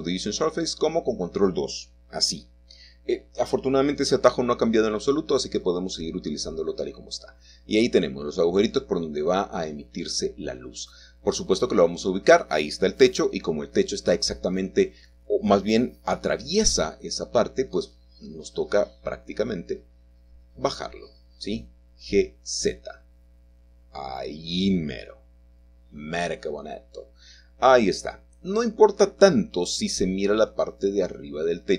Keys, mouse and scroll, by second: 2.9 shift+click, 4.7-5.8 middle drag, 6.8-8.2 middle drag, 6.8-7.2 scroll up 2, 7.2-8.2 scroll down 2, 10.4 alt+h, 15.8 click, 16.3 click, 16.8 click, 17.3 click, 18.3 g, 26.4-27.4 shift+drag.